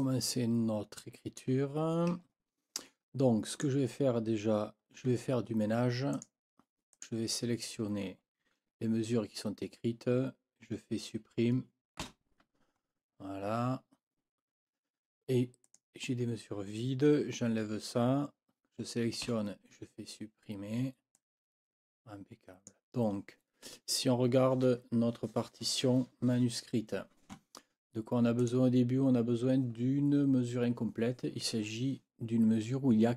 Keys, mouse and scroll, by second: 0.2-1.6 drag, 2.3 ctrl+scroll up 2, 3.5 click, 6.1 shift+click, 6.9 shift+click, 12.0 Delete, 15.6 click, 19.2 Delete, 21.2-22.8 drag, 28.4 click.